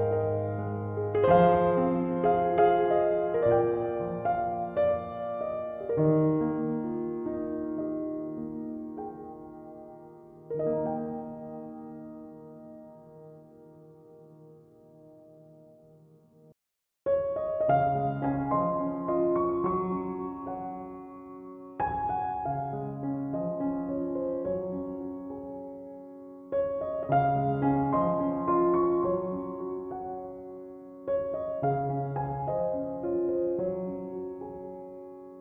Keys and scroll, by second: 1.4 b, 17.6 scroll, 21.0 scroll, 22.5 b.